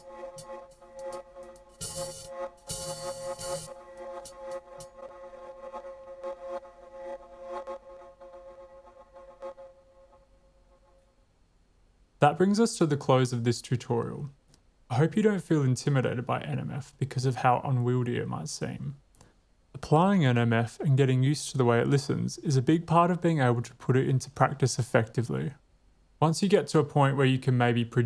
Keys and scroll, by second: 5.0 space.